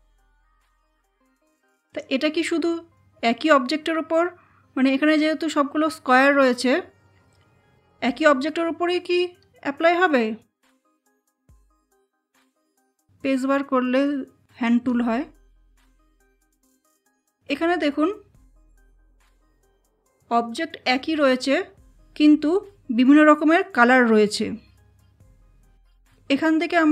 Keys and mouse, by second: 1.8 click, 11.6 space, 11.9 click, 12.1 space, 14.2 space, 15.5 click.